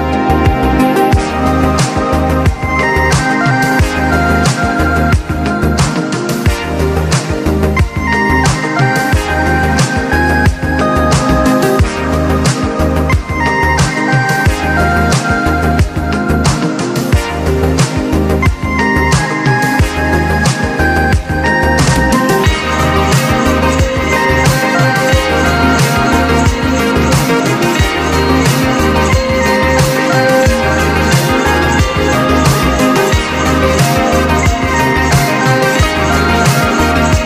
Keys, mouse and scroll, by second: 0.9 click, 3.1-13.1 drag, 9.2 typing, 13.1-15.3 drag, 16.3 click, 17.2 alt+scroll down 1, 17.9 scroll up 1, 18.3 scroll down 1, 18.6 alt+scroll up 1, 19.1-20.4 drag, 20.4 alt+scroll down 1, 20.9-24.1 drag, 24.1 alt+scroll up 1, 24.6 click, 25.3 alt+scroll up 1, 25.6 click, 26.3-27.5 alt+drag, 28.3 click, 29.1 alt+scroll down 1, 29.3 alt+scroll up 1, 30.0 alt+scroll down 1, 30.6-31.7 drag, 31.7-37.2 drag.